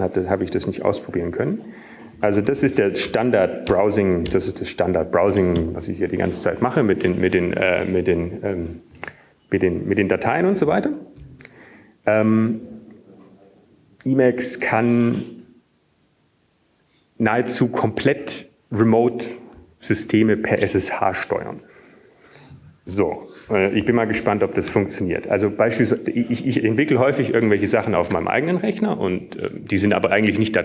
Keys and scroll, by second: 6.7 ctrl+x, 6.7 ctrl+f, 6.7 Return, 7.6 BackSpace, 14.1 u, 26.8 ctrl+x, 28.3 ctrl+f.